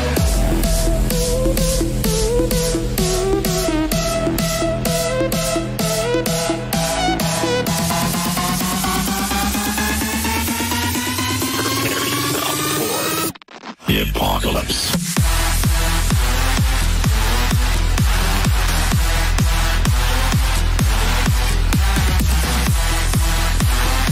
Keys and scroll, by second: 18.9 g.